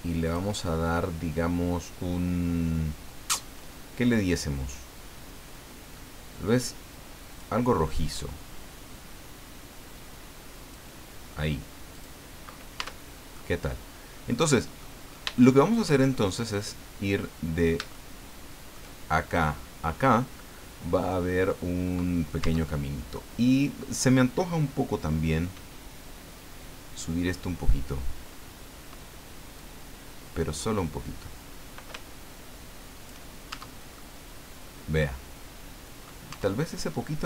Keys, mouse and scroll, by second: 0.2 click, 7.3 click, 8.9-10.9 drag, 11.9 click, 12.8 Tab, 13.4-15.0 middle drag, 15.2 shift+scroll up 1, 15.4 shift+middle click, 16.1-16.6 shift+scroll up 4, 17.9 shift+middle click, 21.1-21.5 scroll down 2, 21.5 middle click, 22.4 Tab, 23.1-24.3 middle drag, 29.6-33.3 drag, 33.5 shift+Tab, 33.9-36.2 shift+middle drag, 36.3 Tab.